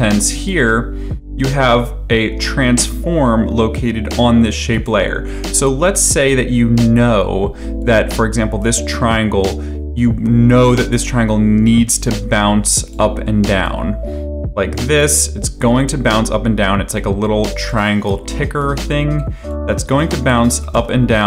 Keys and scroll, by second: 20.4 ctrl+c, 20.7 ctrl+v.